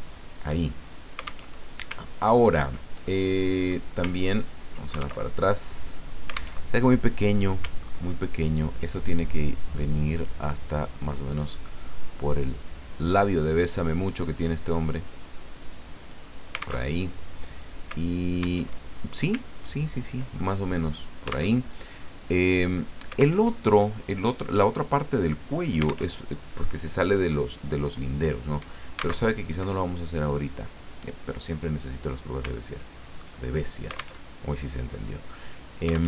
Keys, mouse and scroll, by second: 1.4 alt+Tab, 2.0-2.5 ctrl+scroll down 2, 3.0 ctrl+middle click, 4.2 ctrl+scroll down 2, 5.2 ctrl+alt+Tab, 6.6 alt+Tab, 7.8-8.2 ctrl+scroll up 2, 10.1-13.5 drag, 14.3-16.2 drag, 16.9 alt+Tab, 18.6 alt+Tab, 19.5-19.9 ctrl+scroll down 2, 20.4 ctrl+click, 21.5 alt+Tab, 23.4 alt+Tab, 25.4 click, 26.1 alt+Tab, 29.2 alt+Tab, 29.6 Escape, 31.3 click, 32.4 ctrl+click, 34.2 alt+Tab.